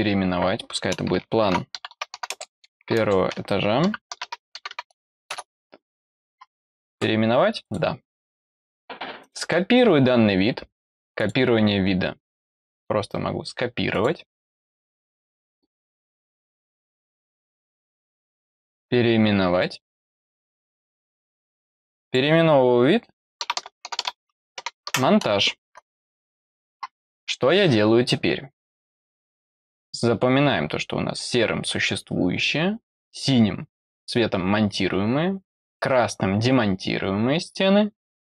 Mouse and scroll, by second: 7.6 click, 9.1 right click, 11.1 click, 13.8 click, 16.8 click, 18.0 right click, 19.9 click, 20.7 click, 21.1 click, 30.4 middle click.